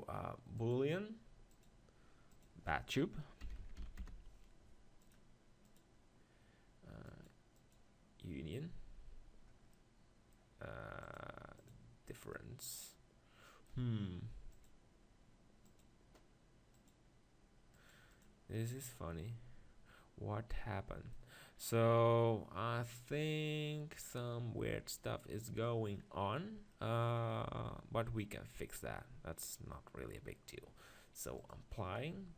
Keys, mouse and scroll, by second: 0.1 click, 9.7-11.8 middle drag, 11.8 click, 12.3-14.3 middle drag, 17.0-19.7 drag, 19.7-20.8 middle drag, 23.3 scroll down 1, 23.4-28.6 middle drag, 29.5-31.6 middle drag, 31.6 click.